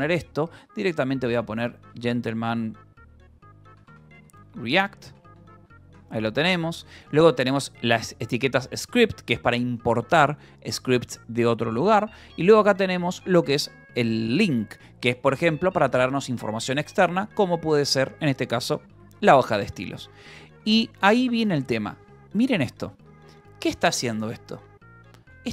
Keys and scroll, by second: 0.0-5.4 typing, 5.5 Escape, 6.3 ctrl+s, 6.6 j, 7.6 j, 7.9 k, 8.9 Escape, 12.2 j, 13.0 shift+v, 14.8 Escape, 15.2-16.1 typing, 16.9 Escape, 17.1-20.5 typing, 19.9 Escape, 21.7-22.5 typing, 25.2 Escape, 25.4-25.5 typing.